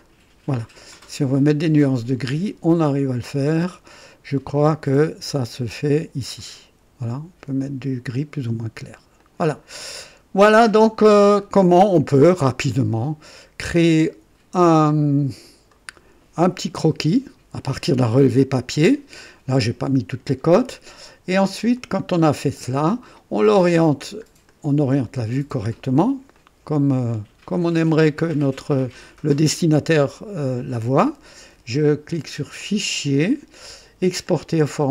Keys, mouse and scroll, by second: 6.3-8.6 drag, 9.2 click, 9.7 click, 11.0 scroll down 1, 11.5 scroll up 1, 12.7 click, 13.7 right click, 14.6 click, 15.7 right click, 21.7 click, 22.8 scroll up 1, 24.0 scroll down 1, 24.5 right click, 26.3-29.8 drag, 32.5 click, 34.2 click.